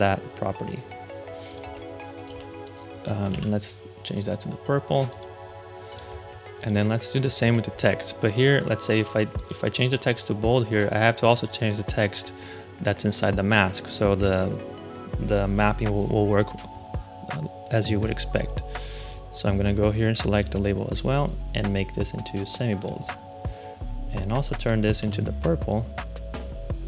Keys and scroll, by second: 2.2 ctrl+c, 3.2 ctrl+c, 24.9 ctrl+c.